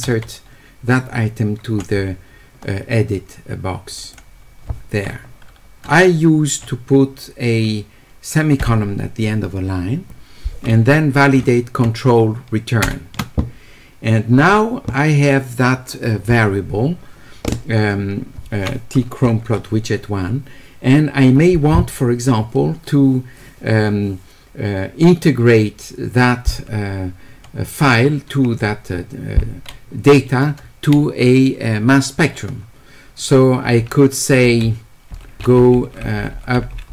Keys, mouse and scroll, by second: 3.9 click, 4.0 click.